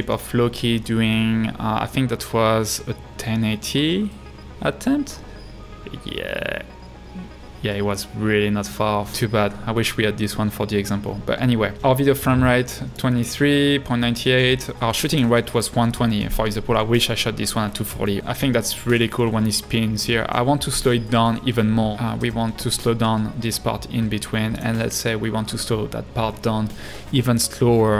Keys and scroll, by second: 9.2 space, 22.2 b.